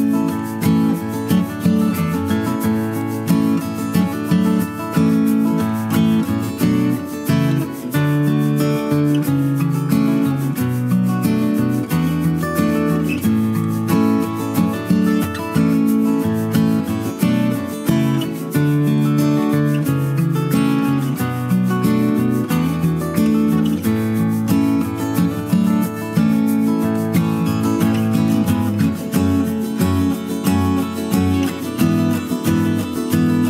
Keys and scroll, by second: 7.9 ctrl+z.